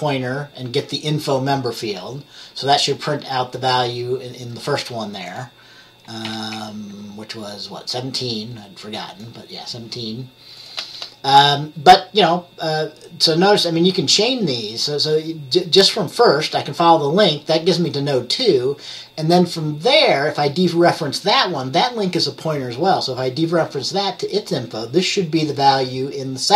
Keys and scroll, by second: 6.3 typing, 6.4 F10.